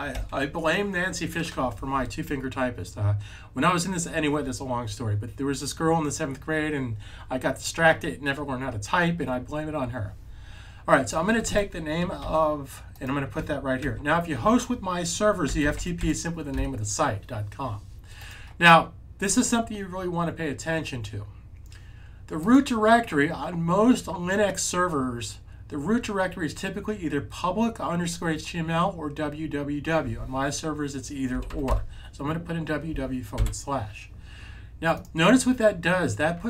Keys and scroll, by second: 0.0 super+v, 2.1-2.8 typing, 12.1 super+c, 13.7 super+v, 15.3-15.8 typing, 31.2-31.5 typing, 33.2 typing.